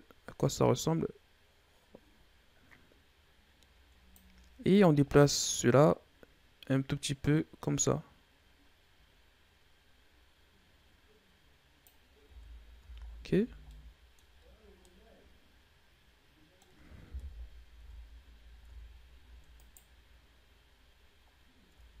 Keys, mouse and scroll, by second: 4.6-7.6 drag, 12.1 Tab, 12.7 a, 12.9-13.6 scroll down 2, 13.6-14.2 middle drag, 14.2-14.7 scroll up 8, 14.7-17.0 middle drag, 17.0 KP_1, 17.7 Tab, 18.1-18.5 scroll down 2, 18.5 Tab, 19.5 right click, 20.7-21.2 scroll down 1, 21.2-21.9 scroll up 1, 21.9 ctrl+z.